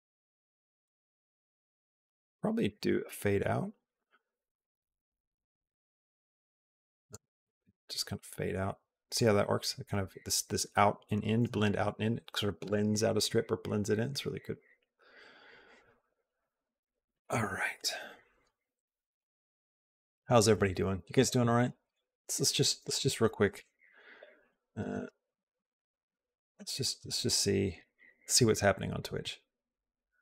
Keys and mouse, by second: 0.8-1.8 shift+drag, 2.6-3.6 shift+drag, 4.4-6.9 drag, 7.8-9.0 drag.